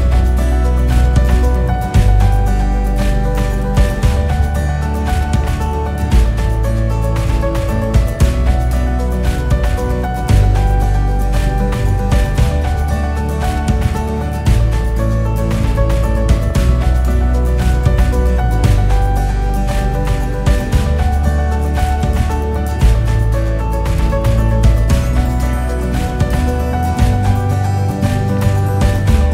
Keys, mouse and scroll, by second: 1.0-1.6 scroll down 3, 2.3 KP_2, 2.9 scroll up 2, 3.4 scroll down 1, 5.6 shift+a, 6.5 g, 8.4 KP_1, 9.4 KP_8, 10.3 ctrl+KP_1, 11.5 KP_0, 12.1-13.4 scroll down 10, 13.4 KP_7, 13.8-14.3 scroll down 1, 14.3-14.9 scroll up 2, 14.9 scroll up 1, 15.1 g, 17.1 KP_0, 17.9-18.8 scroll up 4, 18.8 g, 22.7 KP_7, 23.6-25.3 scroll down 1, 25.3-25.6 scroll down 1, 26.1 g, 27.9 KP_0, 28.6 scroll up 4, 29.2-29.3 scroll down 1.